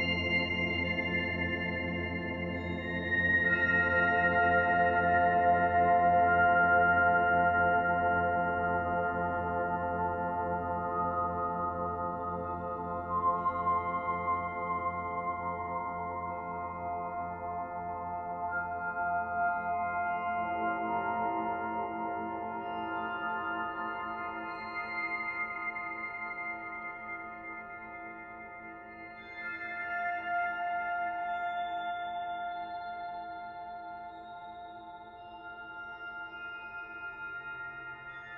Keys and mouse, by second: 2.3 b, 3.4-7.4 drag, 7.8 click, 9.5 Tab, 11.1-12.0 drag, 12.8-14.3 drag, 14.1 e, 14.3 s, 15.0 click, 16.8-17.7 drag, 19.0 /, 20.2-21.7 alt+drag, 22.0-22.5 alt+shift+drag, 22.3 typing, 24.3-24.7 alt+drag, 24.8-25.3 drag, 25.8-27.2 alt+drag, 26.2-26.9 typing, 32.5-35.9 drag, 38.1 click.